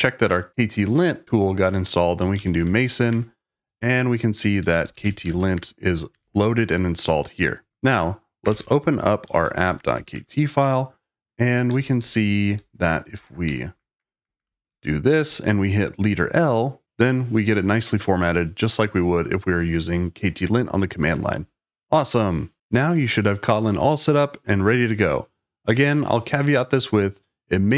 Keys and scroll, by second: 2.0-3.1 typing, 4.3-6.1 typing, 7.4-10.3 typing, 11.5-14.3 typing, 14.6 Escape, 16.8 l.